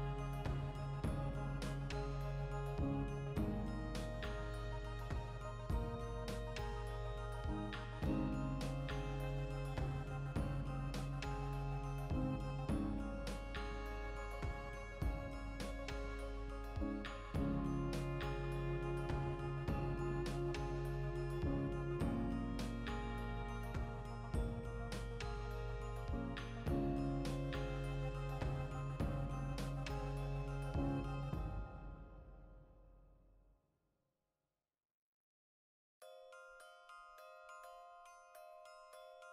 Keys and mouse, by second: 0.0 click, 0.8 shift+middle click, 1.6 alt+right click, 1.7-3.9 middle drag, 2.3 ctrl+b, 3.2 click, 3.9 alt+right click, 4.0-5.4 middle drag, 4.3 ctrl+b, 5.1 click, 5.4 g, 6.2 click, 6.2-7.8 middle drag, 7.8 alt+right click, 8.1 ctrl+b, 8.8 click, 8.9-12.1 middle drag, 11.4 ctrl+r, 12.1 click, 12.3-13.5 shift+middle drag, 13.0 ctrl+r, 13.5 click, 13.9 alt+right click, 14.1-17.5 ctrl+shift+middle drag, 16.9 e, 17.4 click, 17.5 e, 17.8-20.8 middle drag, 17.8 click, 20.3 ctrl+r, 20.8 right click, 21.5 ctrl+r, 22.7 click, 22.9 ctrl+r, 23.8 click, 24.0-25.4 middle drag, 24.8 ctrl+r, 25.4 right click, 25.5 ctrl+z, 25.9 ctrl+r, 26.8 click, 27.0-28.9 shift+middle drag, 28.2 Tab, 28.5 alt+h, 28.9 right click, 29.2 Tab, 29.2-32.5 middle drag, 31.8 ctrl+r, 32.5 click, 33.1 ctrl+KP_Add, 33.5 ctrl+KP_Subtract, 34.3 g, 34.8 click, 34.9-39.3 middle drag, 37.4 Tab.